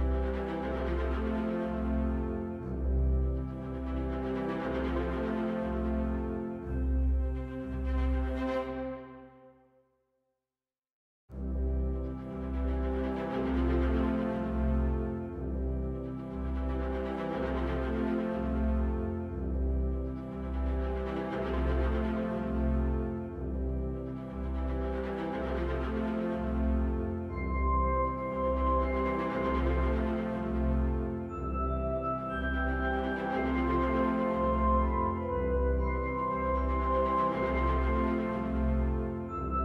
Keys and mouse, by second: 3.0 right click, 3.7-4.2 middle drag, 5.0 shift+click, 5.8 ctrl+KP_Subtract, 7.3 middle click, 8.5 shift+click, 10.9 ctrl+shift+KP_Subtract, 12.6-15.5 middle drag, 25.1 Delete, 27.2 Delete, 28.0-29.5 middle drag, 30.2 shift+a, 38.6 click, 39.3 g, 39.5 z.